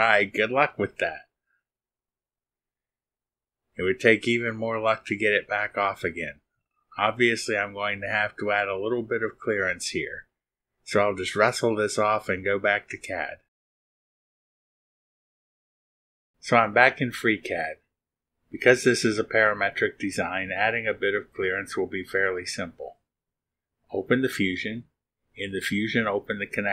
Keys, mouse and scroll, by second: 15.9 click, 22.1 click, 22.9-23.2 scroll down 1, 26.2 click.